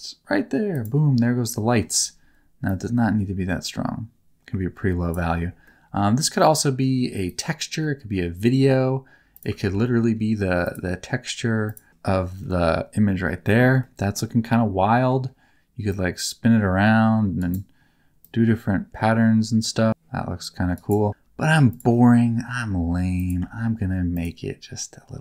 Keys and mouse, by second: 0.7 click, 1.6 middle click, 2.7-5.0 drag, 5.6 middle click, 6.3 middle click, 7.2 click, 7.8 middle click, 9.3 click, 9.5 ctrl+t, 9.9 middle click, 10.7-11.7 drag, 12.5 middle click, 13.9 middle click, 15.0 middle click, 15.9-17.4 drag, 18.2-20.7 drag, 22.2 x, 23.1 click, 23.3 x.